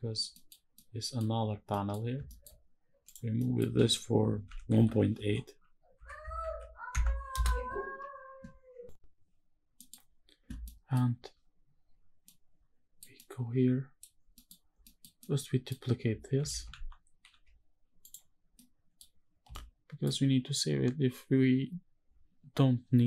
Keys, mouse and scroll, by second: 0.4-0.9 middle drag, 1.0-1.4 scroll up 1, 1.4 middle click, 1.9 shift+middle drag, 2.3-2.7 scroll up 1, 2.7 click, 3.1 middle click, 3.6-4.2 scroll up 1, 4.2-6.1 typing, 6.6 KP_Subtract, 7.0 KP_Enter, 8.7 middle click, 8.7-9.5 scroll down 1, 9.5 middle drag, 9.8-10.3 scroll up 2, 10.3 middle drag, 10.8 scroll up 1, 11.9-12.7 middle drag, 12.9-13.7 middle drag, 13.9-14.5 scroll down 3, 14.0 middle click, 14.5 middle drag, 14.9-15.4 middle drag, 16.2 shift+d, 17.0 x, 17.0 y, 17.7 click, 18.3-18.7 middle drag, 18.8-19.2 scroll up 2, 19.2-19.7 shift+middle drag.